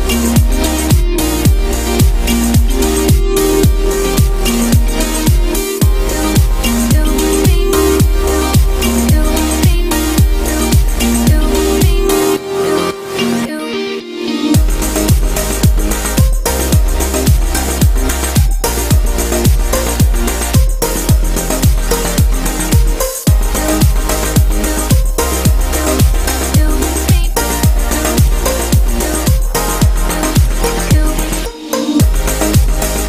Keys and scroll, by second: 31.6 ctrl+t.